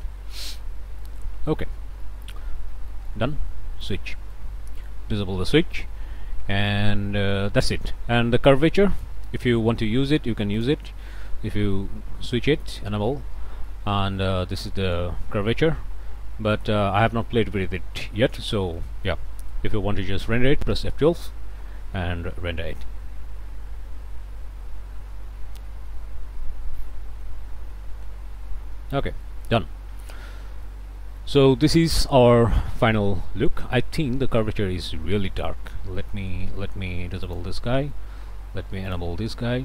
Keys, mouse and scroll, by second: 0.7 click, 1.3 shift+click, 2.1 shift+click, 2.2 middle click, 2.6 scroll down 1, 3.0 middle click, 3.9 click, 4.4 click, 5.2 scroll up 1, 5.4 click, 8.1 click, 9.0 ctrl+shift+click, 10.6 click, 12.1-12.7 scroll up 4, 13.2 scroll down 2, 13.7 click, 18.8 click, 19.5 click, 20.6 F12, 28.7-29.1 scroll down 1, 29.2 click, 29.6 scroll down 1, 30.0-31.4 middle drag, 31.5 shift+middle click, 31.8 shift+scroll up 2, 32.2-34.2 shift+middle drag, 34.4 middle click, 34.8 scroll up 2, 35.2 scroll down 1, 35.2 middle click, 35.7-36.0 scroll down 1, 36.0 middle click, 36.4 scroll down 2, 37.3 click, 37.7 middle click, 38.1 scroll up 1, 38.9 click.